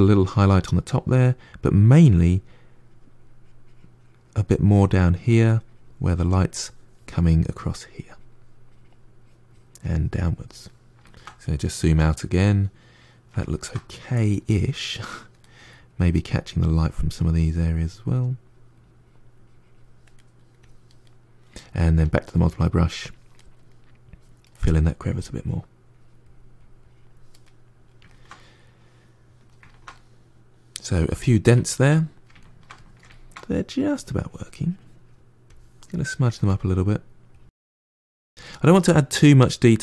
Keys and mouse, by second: 7.4-10.9 drag, 10.9-14.7 ctrl+middle drag, 14.7 click, 15.3 middle click, 15.7-20.0 drag, 20.0 middle click, 20.5 click, 20.9-21.9 middle drag, 21.9-23.2 drag, 23.2 middle click, 23.9 click, 24.4 middle click, 24.9-27.3 drag, 27.3-33.8 middle drag, 33.8-36.5 drag, 36.5 f, 36.8-39.8 drag.